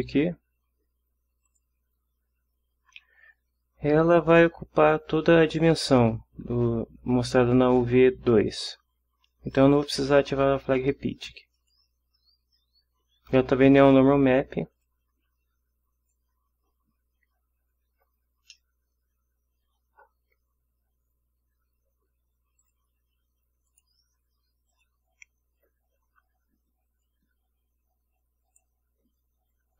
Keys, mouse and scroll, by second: 1.5 click, 11.5 click, 14.7 click, 15.9 click, 18.5-19.8 ctrl+middle drag, 22.6 click, 23.7 click, 24.7 click, 27.0-28.7 drag.